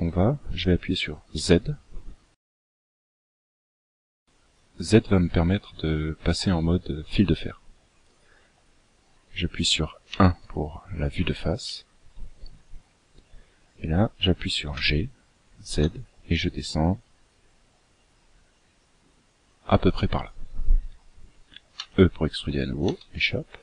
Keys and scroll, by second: 0.9 z, 9.5 KP_1, 14.2 g, 21.2 e.